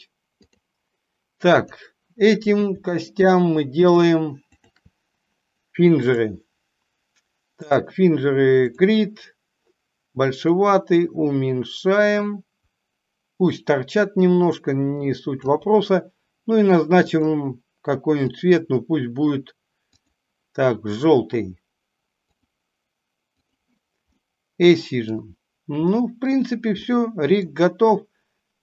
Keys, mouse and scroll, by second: 0.4 click, 2.8 shift+click, 3.7 shift+click, 4.4 shift+click, 6.1-7.8 drag, 10.4-15.4 drag, 17.1 click, 18.3 click, 19.9-22.4 drag, 23.3 click, 24.1-24.9 middle drag, 25.8 middle click, 26.8-27.3 middle drag.